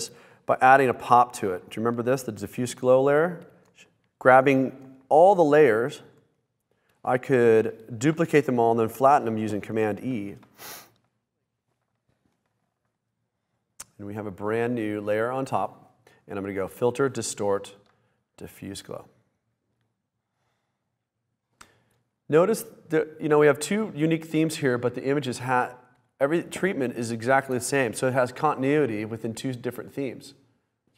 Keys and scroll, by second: 9.0 super+e.